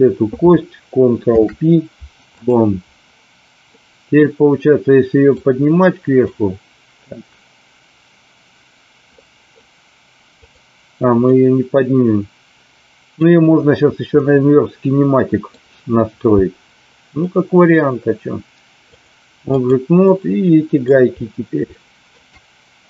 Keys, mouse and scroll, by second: 1.2 ctrl+p, 3.8 middle click, 5.4 click, 9.0-9.6 middle drag, 11.2-13.2 middle drag, 14.2-15.5 middle drag, 17.2 middle click, 18.8-19.8 drag, 20.1 middle click, 21.8-22.2 shift+middle drag.